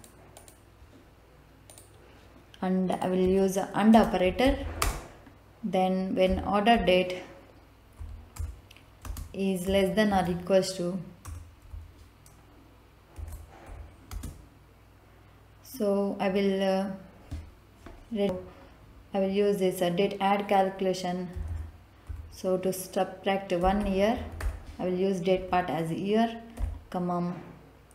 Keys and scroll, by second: 3.9-4.8 typing, 6.2 o, 6.7 r, 7.9 Down, 8.3 Return, 9.0 space, 10.1 shift+9, 11.2 BackSpace, 13.1 shift+,, 13.6 =, 14.0 space, 18.2 Return, 21.3 ', 22.0 Left, 23.5 y, 23.7 e, 24.1 a, 24.3 r, 25.3 Right, 26.5 ,.